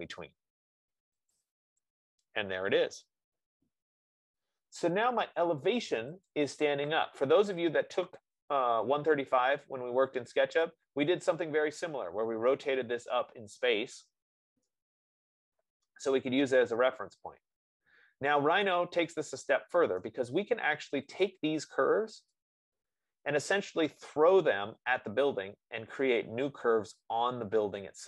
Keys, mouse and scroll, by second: 1.7-4.0 drag, 4.0 scroll down 1, 4.1 middle click, 6.8 click, 7.4 click, 12.1 right click, 20.3 right click, 21.6 click.